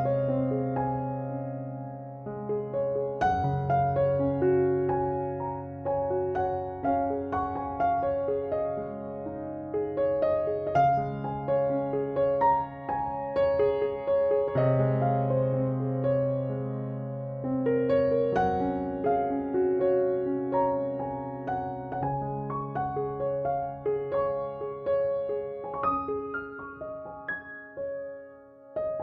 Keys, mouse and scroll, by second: 11.2 Escape, 23.3 3, 23.8 ., 24.2 5, 24.5 Return.